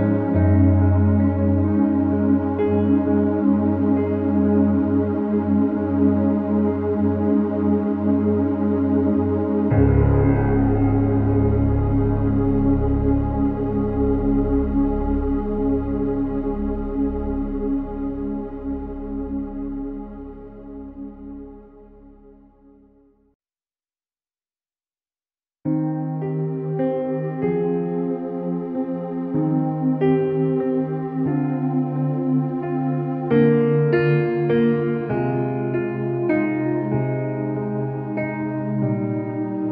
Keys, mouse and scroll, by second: 2.4 click, 3.7 ctrl+u, 4.7-5.4 drag, 6.0 space, 6.3 e, 6.8-7.7 [, 7.9-8.9 click, 8.9-10.2 typing, 11.3-12.1 space, 12.5 click, 13.0 ctrl+-, 13.5 ctrl+t, 13.8-15.7 drag, 16.9 ctrl+=, 17.5 ctrl+=, 18.3-21.6 typing, 18.5 click, 19.2 ctrl+=, 19.7 click, 20.5 click, 21.9 alt+t, 22.6 click, 26.1 click, 27.2 click, 29.5-30.3 space, 30.5 ctrl+=, 31.3 space, 31.5 click, 31.7 space, 32.0-32.5 space, 32.7 l, 33.4 click, 34.7 space, 35.4 ctrl+-, 37.1 space, 37.3 click, 37.5-38.0 space, 39.1 click, 39.4 ctrl+-.